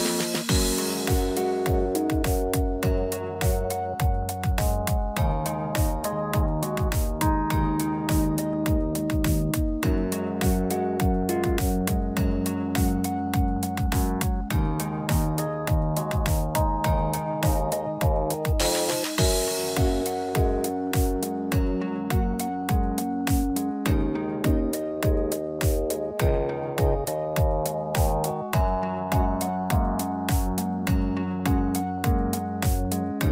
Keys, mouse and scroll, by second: 0.4 s, 6.4 middle click, 7.5 click, 10.5 middle click, 11.2 shift+middle click, 11.6-11.9 scroll up 2, 11.9 click, 12.1 Tab, 12.3 middle click, 12.8 click, 14.1 i, 17.9 middle click, 21.6 middle click, 24.0 click, 25.3 middle click, 26.0 ctrl+z, 26.9 click, 28.5 e, 30.4 click, 32.6 middle click, 33.0 shift+middle click.